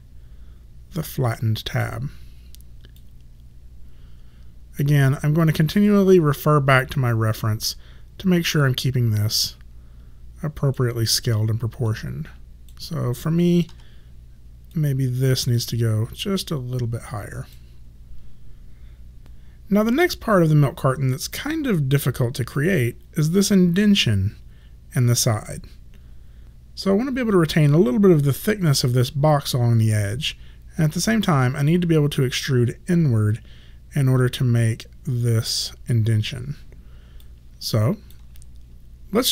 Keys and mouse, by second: 3.1 click, 9.4 click, 11.9 click, 13.8 w, 14.8 click, 19.3 click, 37.3 click.